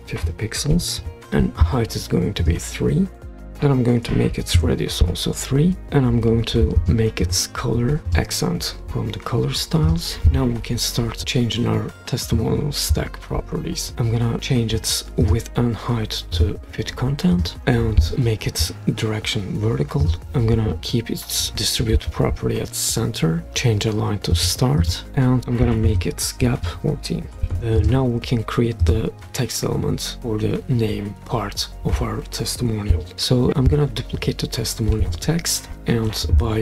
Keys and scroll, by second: 0.7-4.3 typing, 1.3 Return, 4.5 Return, 26.6 Right, 27.3 BackSpace, 27.4 4, 27.5 Return, 34.9 super+d.